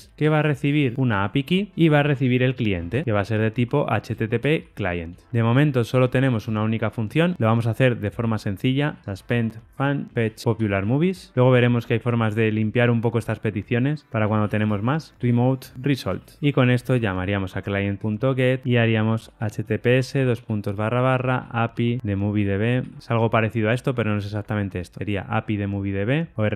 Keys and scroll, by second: 1.1 Tab, 15.7 Return, 24.2 Tab.